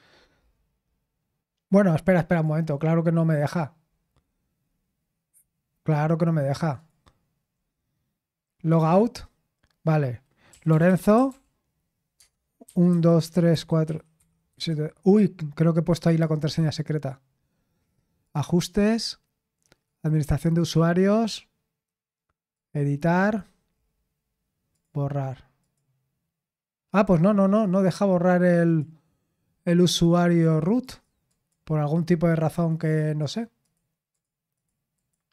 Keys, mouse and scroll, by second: 0.9 typing, 2.3 click, 4.0-6.3 scroll up 1, 6.7 click, 8.8 click, 10.2-14.5 typing, 12.1 Tab, 16.0 click, 18.2 click, 19.8 click, 22.5 click, 24.7 click, 25.0 click, 25.6 click, 27.6 click, 28.6 click, 29.7 click, 30.4 click, 30.8 click, 31.3 click, 32.5 click, 32.9 click, 33.6 click, 34.1 click, 34.5 click, 34.9 click.